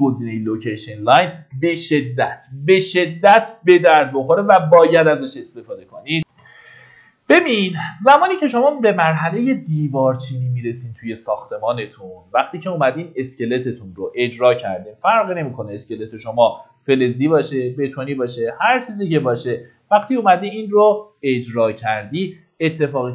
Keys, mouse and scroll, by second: 0.6 middle click, 1.4 Escape, 6.6 F9, 8.4-23.1 drag.